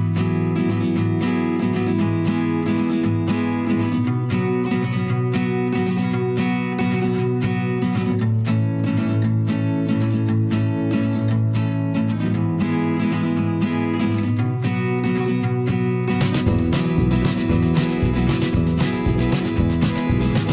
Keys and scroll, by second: 0.0 v, 1.2 a, 3.4 v, 4.6 a, 8.0 v.